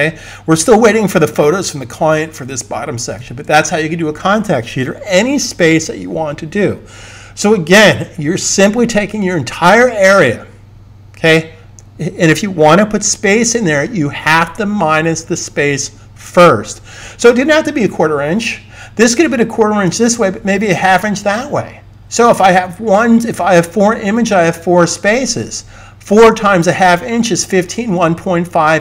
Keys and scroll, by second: 3.1 s.